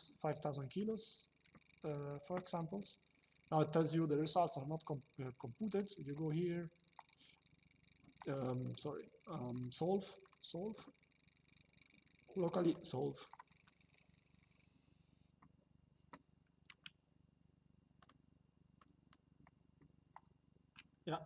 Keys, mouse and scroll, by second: 0.5 click, 5.4 click, 8.3 click, 12.4 click, 17.7 click, 20.9 shift+middle click.